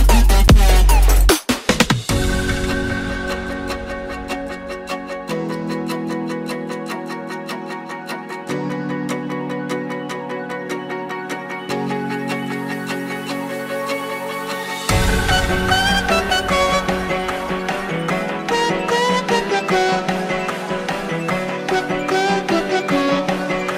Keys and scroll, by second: 0.9 shift+/, 12.0 space, 13.6 Home.